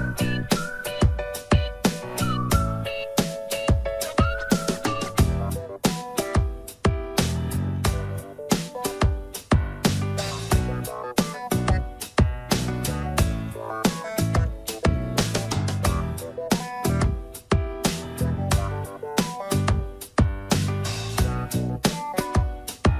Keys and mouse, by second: 4.5 shift+middle click, 5.7 click, 6.5 click, 6.7-8.0 drag, 9.3-10.4 drag, 11.4-12.9 drag, 13.9 shift+middle click, 14.7 shift+middle click, 16.1-17.4 drag, 17.7 shift+middle click, 18.9-21.8 drag, 22.1 shift+middle click.